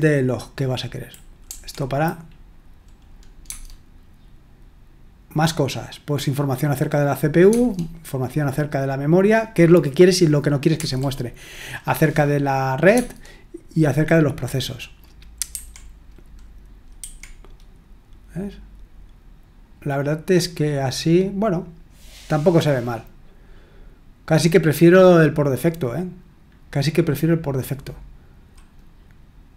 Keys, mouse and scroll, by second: 1.4 Right, 3.4 Tab, 7.5 Tab, 10.7 Tab, 12.9 Tab, 15.5 Escape.